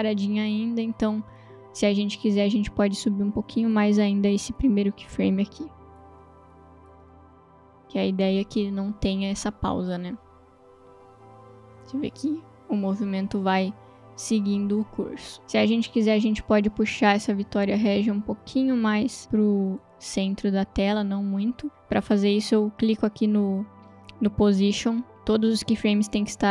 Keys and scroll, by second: 2.6 space, 6.9 space, 15.4 space.